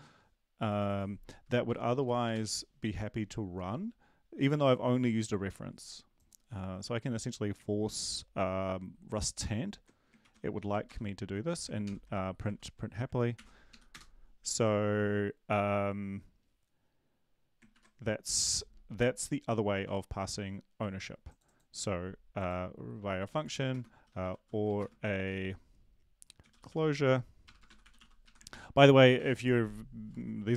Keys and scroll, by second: 2.0 Delete, 2.3 ctrl+s, 10.3 ctrl+`, 10.6 Up, 10.8 Return, 11.8 ctrl+;, 13.3 ctrl+l, 13.7 Up, 13.9 Return, 17.7 ctrl+`, 24.0-25.1 typing, 26.8-28.5 typing, 28.5 ctrl+s.